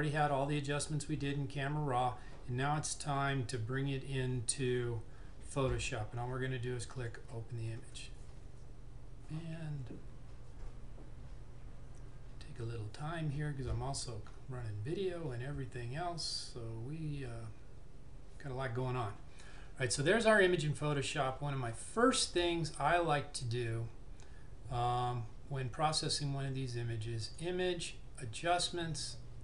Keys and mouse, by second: 7.0 click, 27.4 click.